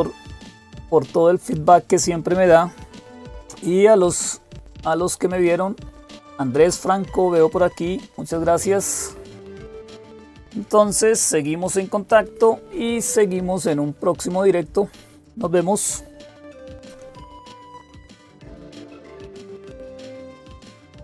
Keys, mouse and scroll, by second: 18.6 click.